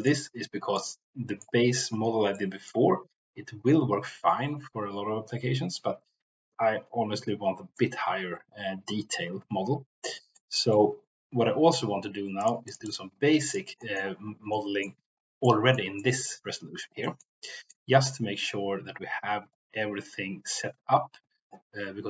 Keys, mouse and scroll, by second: 0.7 middle click, 2.2 middle click, 7.6-10.7 middle drag, 12.4 click, 12.9 drag, 13.8 middle click, 14.4 middle click, 15.4 middle click, 16.0 shift+middle click, 17.0-17.3 shift+middle drag, 17.5 middle click.